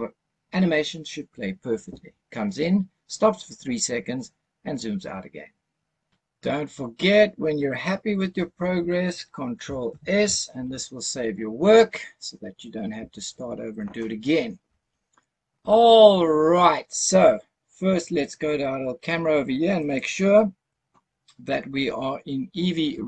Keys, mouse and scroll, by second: 9.9 ctrl+s, 19.7 click.